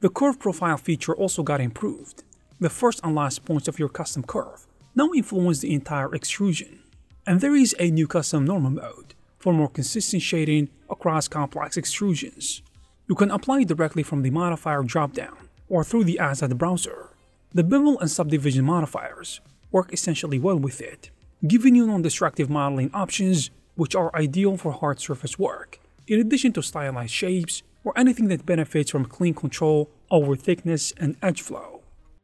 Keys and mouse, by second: 2.0 Tab, 2.1 click, 2.4 Tab, 2.6 shift+s, 3.4 Tab, 5.0-6.4 typing, 5.9 click, 7.3 click, 7.4 g, 7.7 click, 8.0 g, 8.2 click, 8.4 Tab, 8.5 click, 9.9 e, 10.2 click, 10.5 shift+click, 11.4 click, 12.8 click, 12.9 Tab, 13.3 click, 13.4 g, 14.7 click, 14.9 g, 16.2-17.4 drag, 18.3 Tab, 18.4 a, 18.8 v, 19.4 click, 20.5 click, 21.8 click, 22.6-24.6 typing, 27.0 g, 30.3 ctrl+click, 30.5 ctrl+middle click, 31.1-32.2 shift+drag.